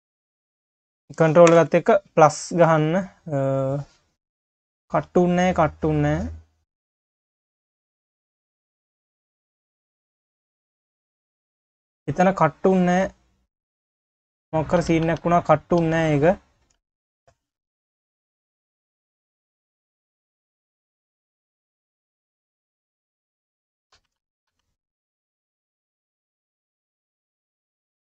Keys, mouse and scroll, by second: 0.0 click, 0.5 shift+click, 1.6 ctrl+KP_Add, 3.3 click, 3.8 q, 4.5 scroll down 2, 4.7 q, 6.0 click, 7.1 click, 8.7 click, 9.4 q, 10.3 click, 10.6 scroll down 2, 10.9 q, 11.5 scroll up 2, 11.7 q, 12.3 q, 13.8-14.8 drag, 14.8 ctrl+z, 15.1 ctrl+z, 15.8 ctrl+z, 16.8 ctrl+z, 17.2 ctrl+click, 17.9 q, 18.4 ctrl+z, 18.8 ctrl+click, 19.4 click, 20.0 q, 21.2 click, 21.7 q, 23.1 click, 23.9 ctrl+z, 24.2 ctrl+z, 24.5 ctrl+z, 25.1 ctrl+z, 26.9 q, 27.9 click.